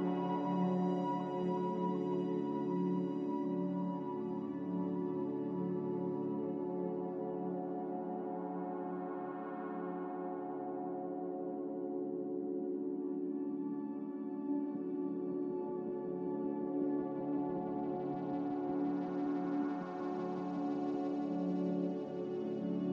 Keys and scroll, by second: 4.8 b, 10.5 Delete, 11.0 x, 13.6 Return, 13.6 typing, 14.7-15.7 typing.